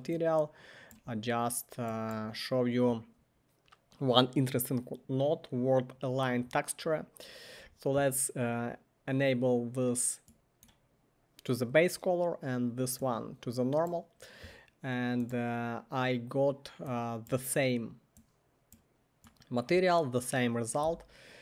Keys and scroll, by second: 20.8 typing.